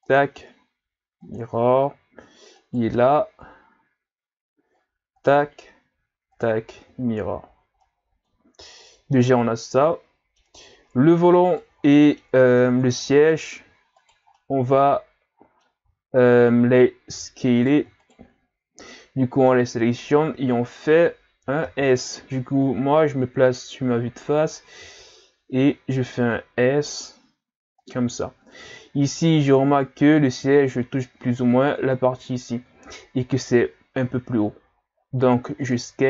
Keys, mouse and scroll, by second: 0.0 click, 2.5 right click, 5.2 click, 7.2 a, 7.5 scroll down 1, 7.8-10.7 middle drag, 10.7 scroll up 2, 11.5 right click, 11.8 scroll up 1, 11.9 middle click, 12.6 scroll down 3, 12.9-14.0 scroll up 2, 14.0 shift+right click, 14.4-15.7 middle drag, 15.7-17.1 scroll up 1, 17.1 g, 18.0 shift+right click, 18.4-18.9 scroll down 2, 18.9-21.7 middle drag, 21.7 KP_1, 24.6 s, 28.4-31.9 scroll up 1, 34.1 s.